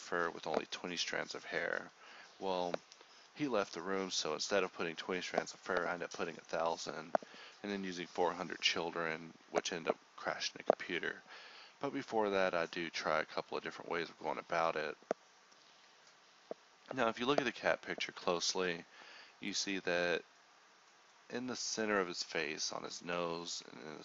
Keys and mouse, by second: 5.3 click, 19.6 z, 20.9 z, 21.2 Tab, 22.9 h, 23.4 l, 23.6 h, 23.8 click.